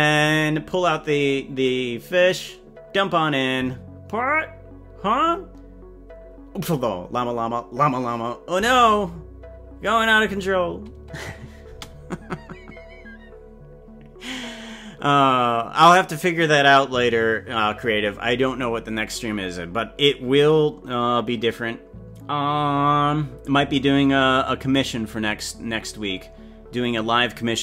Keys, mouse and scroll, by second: 11.8 space.